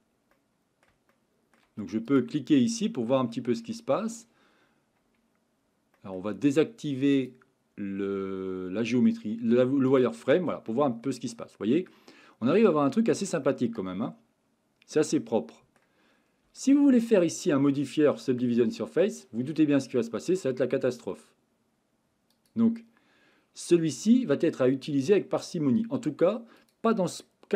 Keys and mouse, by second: 0.3-0.8 middle drag, 1.1-1.5 shift+middle drag, 2.1 click, 2.5-3.1 middle drag, 3.3-3.6 shift+middle drag, 5.9 middle click, 7.2-10.2 drag, 10.7-11.9 middle drag, 12.7-13.2 shift+middle drag, 13.4-15.8 middle drag, 16.6-17.0 shift+middle drag, 17.2 middle click, 20.2-23.4 drag, 24.1-25.1 middle drag, 26.6 click, 27.2-27.5 middle drag.